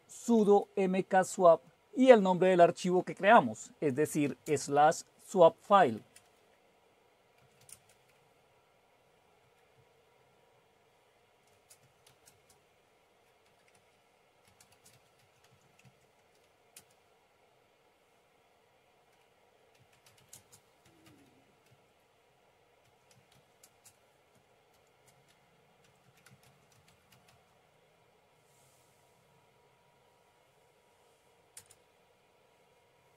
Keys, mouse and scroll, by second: 0.3 ctrl+o, 1.0 Return, 2.3 ctrl+x, 4.1-4.4 typing, 5.7 typing, 6.1 Return, 7.1-9.9 typing, 11.3-12.3 typing, 13.8-16.8 typing, 19.5-23.8 typing, 24.9-27.8 typing, 31.6 Return.